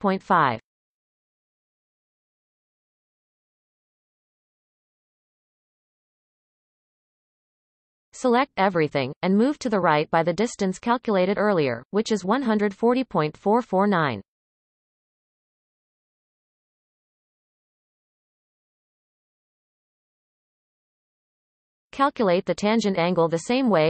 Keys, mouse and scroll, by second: 1.8 Tab, 2.3-2.9 scroll up 1, 2.9 shift+a, 4.6-7.7 drag, 10.0-11.3 scroll down 2, 11.3 a, 11.8-14.0 shift+middle drag, 14.0 g.